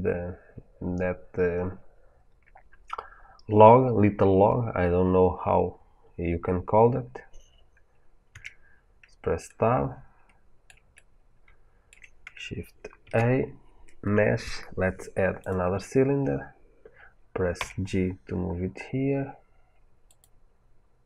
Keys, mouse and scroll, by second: 8.2 Tab, 9.6-12.9 middle drag, 12.9 shift+a, 17.4 g, 20.1 click.